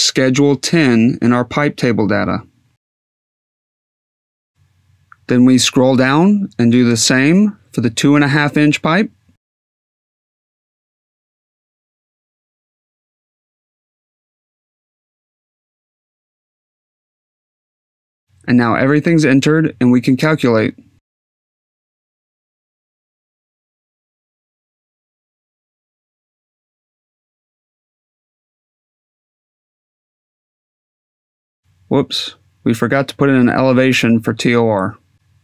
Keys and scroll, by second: 9.3-11.6 typing.